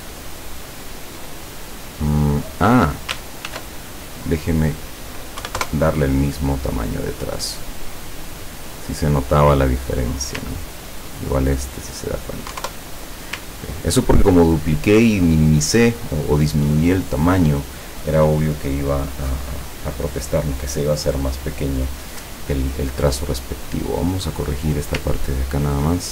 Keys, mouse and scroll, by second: 0.5-1.1 ctrl+scroll up 4, 1.5 ctrl+click, 2.3 click, 3.5 ctrl+shift+f, 4.5 click, 5.4 KP_1, 5.7 KP_Enter, 7.4 click, 8.3 click, 9.8 click, 11.6 click, 12.6 KP_1, 12.7 KP_Enter, 13.8 ctrl+scroll down 2, 23.9 click, 24.5 click, 25.3-25.9 ctrl+scroll up 2.